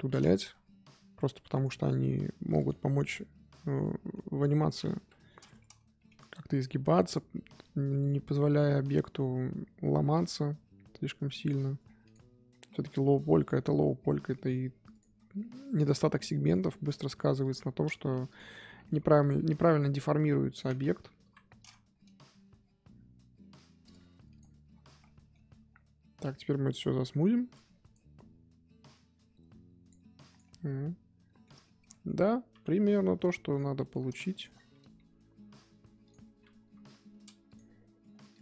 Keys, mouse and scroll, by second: 2.4 click, 3.7-5.0 middle drag, 5.0 KP_1, 6.0 g, 11.8 scroll down 1, 12.0 click, 12.5-13.2 scroll up 4, 12.7 z, 13.2 click, 13.9 scroll down 1, 14.0 middle click, 14.9 click, 15.1 scroll down 2, 15.4 middle click, 15.9 click, 16.2-17.4 middle drag, 17.4 ctrl+click, 18.2 click, 18.6 middle click, 19.2 ctrl+click, 19.6 middle click, 20.4 ctrl+click, 20.8-21.2 scroll up 1, 21.2 KP_1, 22.1 g, 24.7 scroll down 1, 25.0-25.4 middle drag, 25.4 z, 25.6-26.3 scroll down 1, 26.3 click, 27.3-27.7 scroll up 1, 27.8-30.2 right drag, 30.2 click, 30.4-32.1 middle drag, 32.1-32.5 scroll up 1, 32.5 KP_3, 33.2 click, 33.8 shift+middle drag, 34.0-34.3 scroll up 2, 34.3 shift+click, 34.9 g, 36.6 KP_1, 37.5 click, 38.3 shift+click.